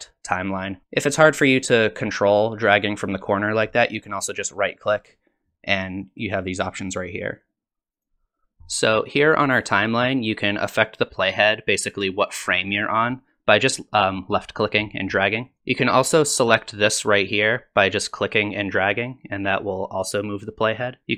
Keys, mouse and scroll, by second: 4.9 right click, 11.4 click, 18.3 click.